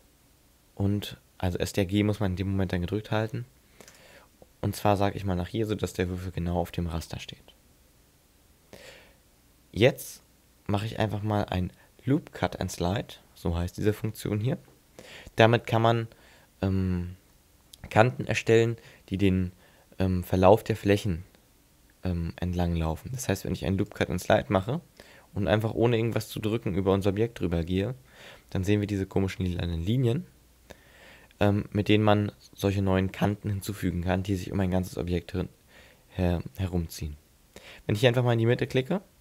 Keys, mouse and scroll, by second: 4.0 ctrl+click, 5.0 middle click, 23.9 click.